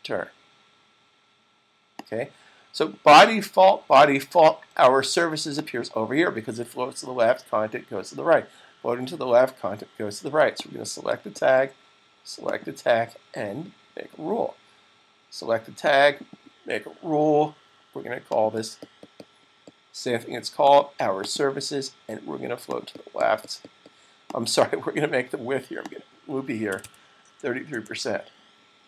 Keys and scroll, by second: 25.9-27.0 typing.